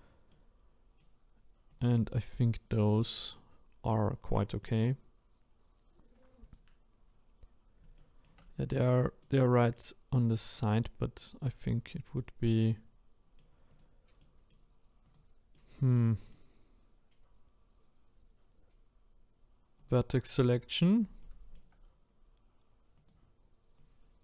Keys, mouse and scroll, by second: 0.3-1.8 middle drag, 1.8 click, 2.9-3.3 scroll down 1, 3.3-6.5 middle drag, 6.5 click, 7.9 shift+middle click, 8.4-9.2 scroll up 4, 9.2-10.7 middle drag, 10.7 click, 11.8-13.8 middle drag, 13.8 click, 14.2 middle click, 15.1 click, 15.6-23.1 middle drag, 23.1 click, 24.1 click.